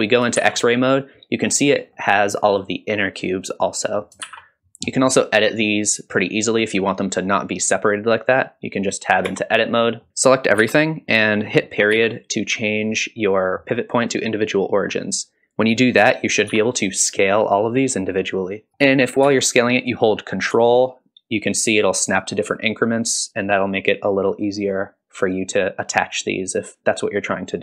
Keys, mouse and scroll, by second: 0.4 shift+z, 0.8-1.4 middle drag, 1.9 middle drag, 3.2-4.0 middle drag, 4.2 shift+z, 4.7-5.0 scroll down 1, 5.0 scroll up 1, 5.6 click, 9.3 Tab, 9.8 middle click, 10.6 a, 11.9 ., 16.5 s, 18.7 middle click, 18.7 scroll up 1, 19.2 s.